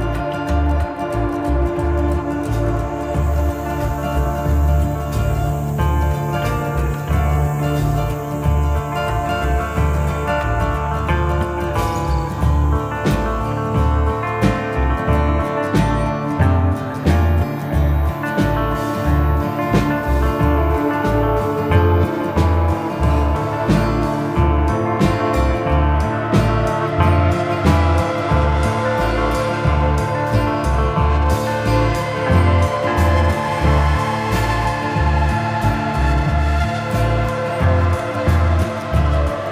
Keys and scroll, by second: 0.3 v, 12.6 v, 25.7 v, 29.5 i, 31.4 v.